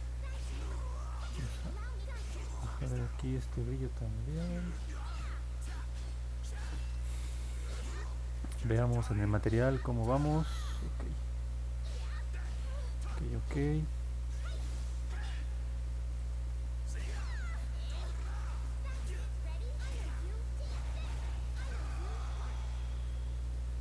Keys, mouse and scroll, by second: 0.1 click, 2.2 click, 3.4 click, 4.7 click, 4.9 click, 8.1 click, 11.3 middle click, 11.8 middle click, 13.6-16.1 alt+drag, 16.4 middle click, 17.3 alt+middle click, 18.7-20.2 alt+drag, 21.0 middle click, 21.7-23.8 alt+drag.